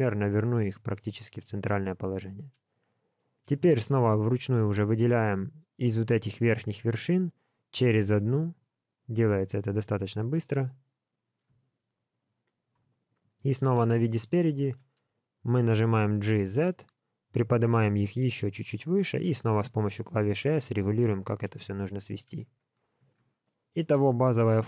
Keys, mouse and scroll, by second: 2.6 middle click, 3.6 click, 4.5 shift+click, 6.9 middle click, 8.4 shift+click, 9.1 shift+click, 10.2 shift+click, 10.6 middle click, 11.9 shift+click, 12.5 shift+click, 13.5 KP_1, 15.8 g, 22.2 alt+a, 23.0 Tab, 24.2 scroll down 1.